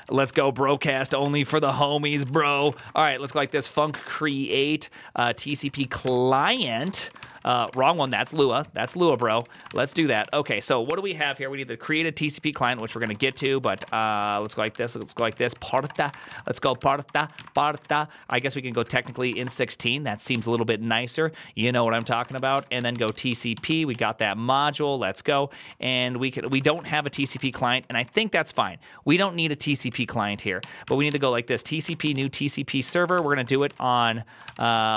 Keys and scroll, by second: 0.0-10.6 typing, 12.4-20.1 typing, 21.6-23.9 typing, 26.2-28.4 typing, 30.2-31.5 typing, 31.7 ctrl+n, 31.9 ctrl+y, 32.5-34.9 typing.